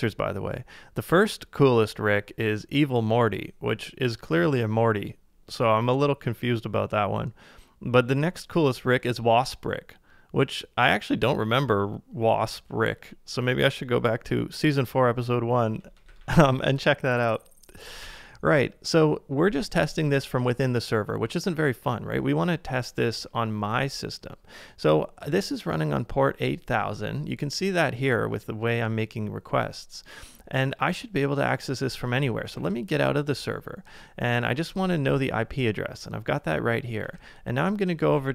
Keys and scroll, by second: 16.1 ctrl+a, 16.3 k, 32.5 ctrl+d, 37.1 super+c, 38.0 super+Tab.